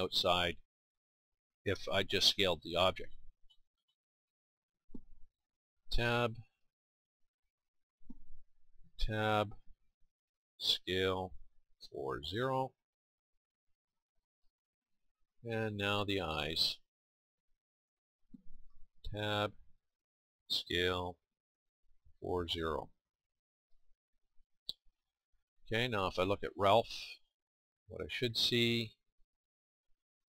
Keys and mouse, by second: 2.5-7.3 middle drag, 5.9 Tab, 7.3-8.9 right drag, 8.9 Tab, 8.9-10.6 middle drag, 10.6 s, 14.2 click, 16.3 Tab, 17.6-18.9 right drag, 18.9 Tab, 20.5 s.